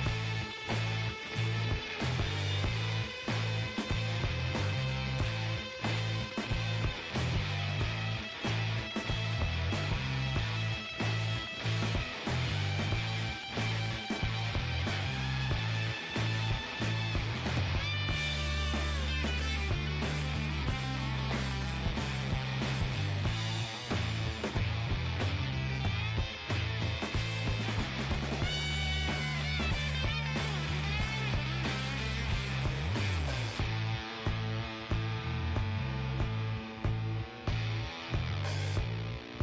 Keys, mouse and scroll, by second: 0.7-2.6 right drag, 1.4 g, 2.4-5.2 middle drag, 4.0 KP_3, 5.7-8.6 middle drag, 5.9 Tab, 10.2-13.3 middle drag, 13.7-16.2 middle drag, 15.3 Tab, 15.4-17.8 right drag, 16.6 g, 19.9-24.6 middle drag, 22.4-24.1 right drag, 24.6-26.8 right drag, 25.5 g, 26.9 right click, 27.4-28.9 middle drag, 28.2 g, 29.1-30.6 middle drag, 30.0 click, 30.9 g, 31.7-32.9 middle drag, 32.6 ctrl+z, 33.5 g, 35.0-36.4 right drag, 35.1 g, 36.4-38.1 middle drag, 38.5-39.4 middle drag, 39.1-39.4 right drag.